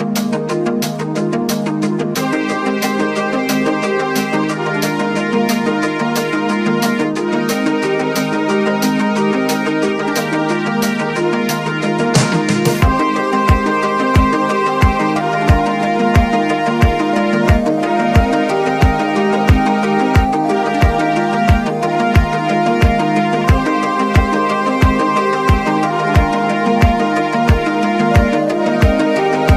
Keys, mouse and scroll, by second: 1.5 click, 3.4 click, 5.1 click, 7.0 click, 9.4 click, 11.4 click, 12.8 click, 14.0 click, 18.4 scroll up 1, 19.2 click, 20.5 click, 21.9-26.5 drag, 26.5 ctrl+z, 27.3 alt+scroll up 1, 28.3-29.5 drag.